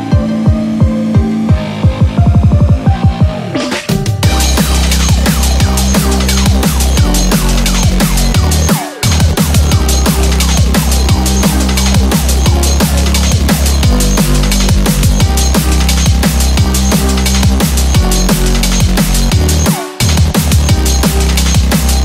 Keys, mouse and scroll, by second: 0.8 click, 3.8 click, 6.5 click, 7.2 scroll up 1, 7.8 scroll up 1, 16.2 scroll down 1, 17.8 shift+d.